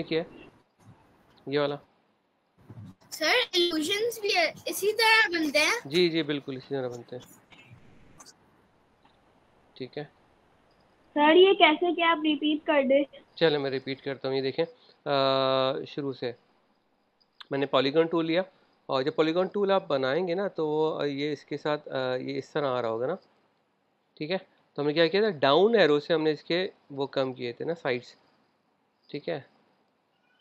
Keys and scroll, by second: 9.6 super+z, 13.8 super+a, 14.0 BackSpace, 20.5 super+z, 21.8 Up, 22.6 Page_Up, 23.8 Down, 26.0 Down, 26.5 Down, 27.0 typing, 27.8 Down.